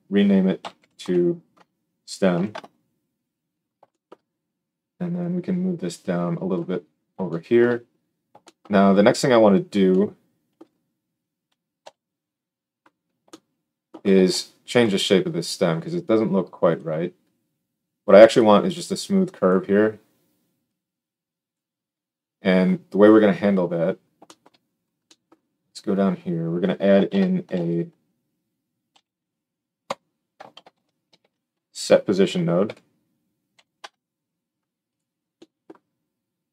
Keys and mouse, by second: 11.7 KP_1, 27.0 shift+s, 30.5 shift+a, 31.0 s, 35.0-36.5 drag.